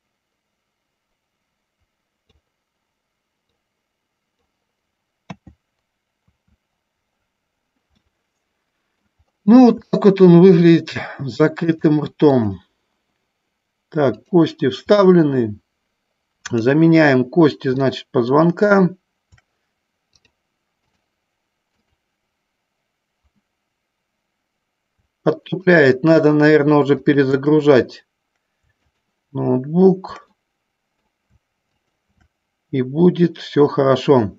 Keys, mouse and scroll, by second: 3.7-4.9 drag, 5.5 KP_2, 8.1 middle click, 10.1 shift+middle click, 12.0 click, 14.4 click, 18.0 middle click, 20.2 click, 22.0-24.6 drag, 25.6-26.9 shift+drag, 27.2-28.5 shift+drag, 29.1-30.4 shift+drag, 30.6 middle click, 32.0-33.2 shift+drag.